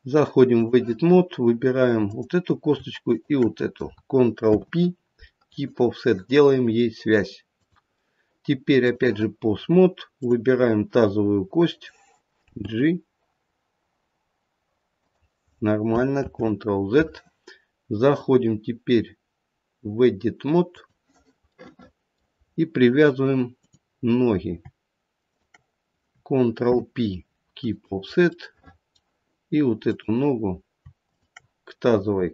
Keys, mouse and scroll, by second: 1.9 click, 3.1 shift+click, 3.4 shift+click, 4.4 ctrl+p, 7.5 click, 10.1 click, 12.5 g, 16.2 ctrl+z, 18.0 click, 21.5 middle click, 22.3-22.8 scroll up 3, 23.6 click, 25.2 shift+click, 26.6 ctrl+p, 29.8 middle click, 29.8 click, 31.1 shift+click.